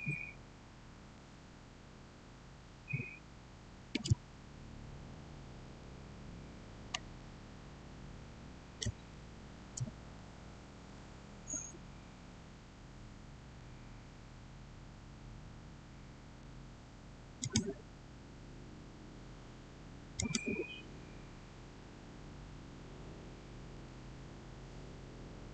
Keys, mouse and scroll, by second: 6.8 click, 7.0-11.3 shift+middle drag, 17.3 click, 20.0 click.